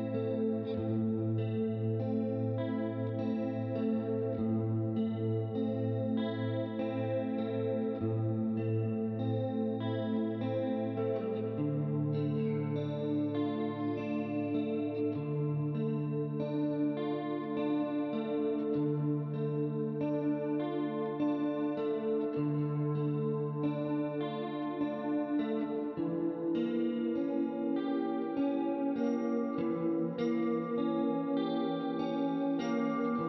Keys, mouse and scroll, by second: 0.3 click, 1.3 click, 2.1 shift+click, 3.0 click, 4.2 click, 5.2 shift+click, 5.9 click, 6.4 right click, 7.0 click, 8.3 click, 9.4 ctrl+z, 9.6 ctrl+z, 10.2 right click, 10.5 middle click, 11.2 right click, 12.0 right click, 13.1 click, 14.1 ctrl+d, 14.8 click, 16.0 click, 17.0 right click, 17.5 middle click, 18.2 click, 19.6 click, 20.8 click, 21.7 right click, 22.1 middle click, 23.1 click, 25.6 click, 27.4 right click, 28.5 right click, 29.6 click, 30.8 shift+click, 31.6 click, 32.4 right click.